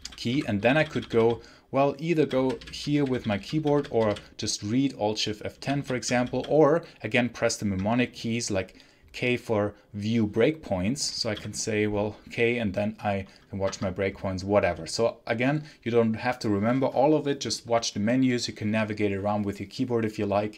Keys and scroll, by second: 0.2 Left, 0.5 Up, 0.7 Up, 2.3 Down, 2.9 Up, 3.1 Up, 3.5 Up, 3.7 Down, 3.9 Down, 5.5 Down, 5.7 Down, 5.9 Up, 6.2 Up, 11.2 k, 13.6 Escape.